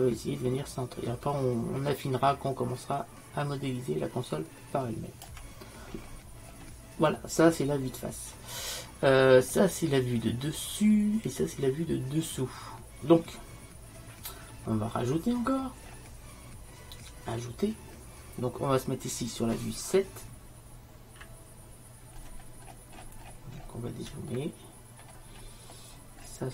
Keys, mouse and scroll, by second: 6.0-7.2 middle drag, 15.3-21.1 middle drag.